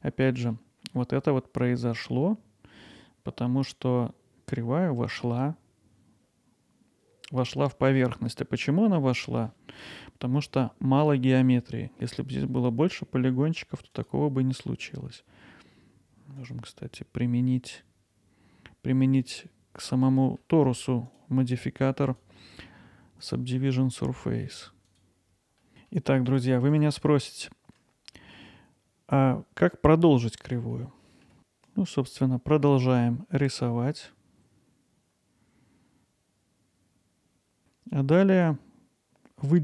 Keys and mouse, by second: 0.4 middle drag, 7.5-14.9 middle drag, 16.4 click, 20.2 middle click, 21.1 drag, 22.2-23.4 drag, 24.9 click, 25.6 middle click, 25.7 Tab, 25.9 middle click, 26.3 click, 26.7 click, 27.7 Tab, 28.2 middle drag, 30.7-31.2 alt+middle drag, 31.4 Tab, 35.9 middle click, 36.3-39.6 middle drag.